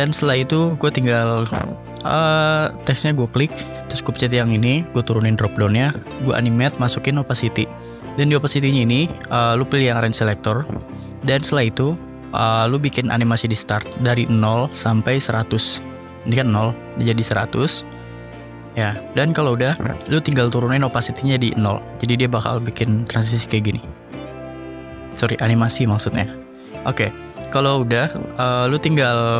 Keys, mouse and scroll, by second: 0.0-1.5 typing, 1.1-2.2 drag, 3.5-4.6 drag, 5.0 click, 6.6 click, 8.2-9.0 drag, 9.0 scroll down 1, 9.0 scroll, 9.1 scroll down 1, 12.1-12.8 drag, 13.9 click, 14.2 scroll, 15.0 scroll, 17.3 click, 18.3 click, 19.8-21.1 drag, 21.7 click, 22.3-22.8 drag, 25.0 click, 28.9 click.